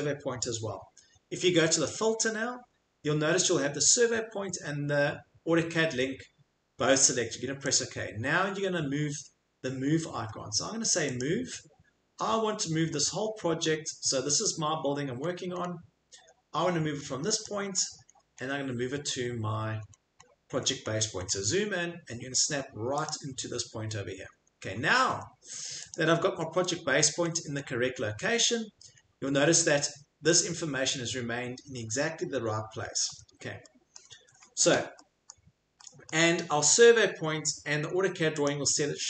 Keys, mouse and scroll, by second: 7.7 click, 8.5 scroll, 9.6 scroll, 11.2 click, 11.6 scroll, 13.7 scroll, 15.1-16.2 scroll, 17.4 click, 17.8-18.5 scroll, 19.0-21.6 scroll, 22.4 scroll, 23.1 click, 24.0-24.4 scroll, 24.9 Escape, 25.1 Escape, 29.1 Escape, 29.4 Escape, 31.7 Escape, 33.0 Escape, 33.9 click, 34.4 click, 34.5 click, 34.6 click, 35.3 click, 36.1 click, 36.3 click, 36.4 click, 36.8-38.1 scroll, 38.1 scroll, 38.5 click.